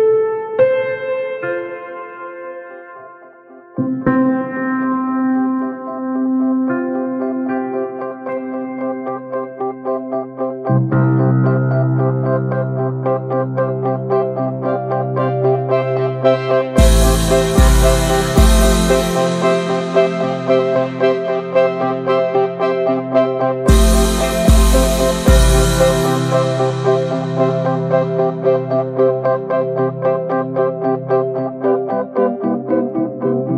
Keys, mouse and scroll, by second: 0.6-1.1 scroll down 2, 0.8 middle click, 1.1 shift+middle drag, 1.2 scroll up 1, 1.3 click, 1.4 ctrl+a, 1.6 drag, 1.7 scroll down 2, 1.8 alt+middle drag, 2.2-2.7 shift+middle drag, 2.7-5.2 scroll up 7, 2.9 shift+middle click, 3.2 shift+middle click, 3.5 middle click, 3.7 Tab, 4.0 shift+middle click, 4.3 shift+middle click, 5.2-6.2 drag, 6.2 scroll down 1, 6.4 shift+middle drag, 6.6 shift+d, 7.2 shift+middle click, 7.8 s, 9.9-10.9 drag, 10.9-14.2 typing, 11.3-11.7 middle drag, 11.7 click, 12.2 click, 12.8 click, 13.5 click, 13.9-14.2 middle drag, 16.8 click, 17.1 l, 17.5-18.7 alt+middle drag, 18.7-19.1 scroll up 1, 19.2 click, 19.7 middle click, 20.0 s, 20.9 alt+shift+middle click, 21.5 e, 23.3-23.6 middle drag, 23.6 ctrl+b, 24.8-25.5 middle drag, 25.5 click, 25.7 shift+middle click, 25.9 s, 28.3-29.9 shift+middle drag, 29.9 s, 31.2 middle drag, 31.4 e, 32.4-32.9 shift+middle drag, 32.9 ctrl+b.